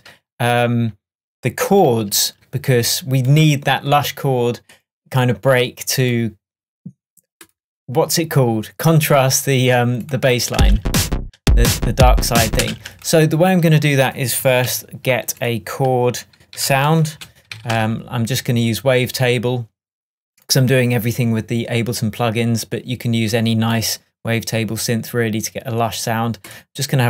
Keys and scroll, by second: 10.6 space, 12.6 space, 16.6 super+r, 17.5 shift+a.